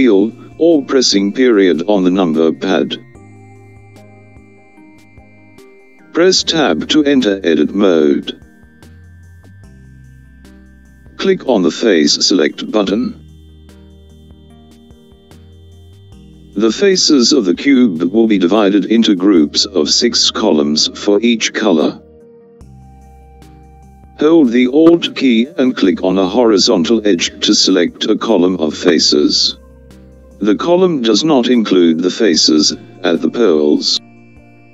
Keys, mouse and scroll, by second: 5.0 KP_Decimal, 10.1 Tab, 15.0 click, 19.2-22.9 middle drag, 23.8 click, 30.6 alt+click, 34.1 alt+click.